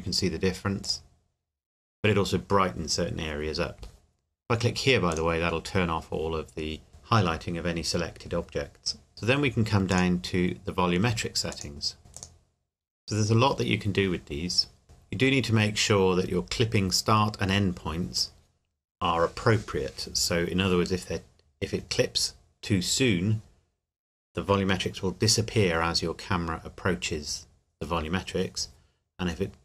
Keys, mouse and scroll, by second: 5.1 click, 9.9 click, 12.1 click, 12.6-13.3 scroll down 1.